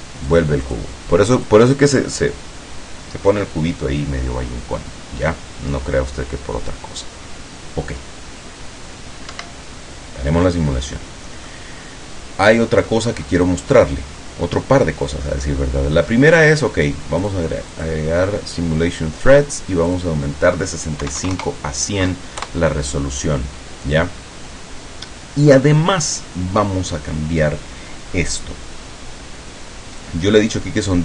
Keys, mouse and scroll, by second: 0.4 click, 1.4 click, 9.4 Escape, 10.9 scroll up 2, 11.0-11.4 scroll down 2, 11.6-13.2 middle drag, 13.4-14.0 scroll up 4, 14.1 scroll down 2, 15.4-16.3 middle drag, 17.4 click, 17.8 click, 20.0 click, 21.2 KP_1, 21.4 KP_0, 22.6 KP_Enter.